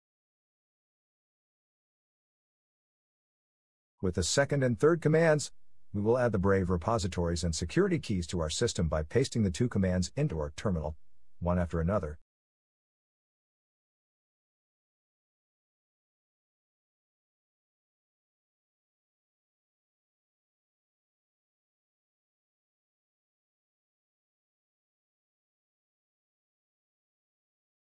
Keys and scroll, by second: 0.0-0.7 typing.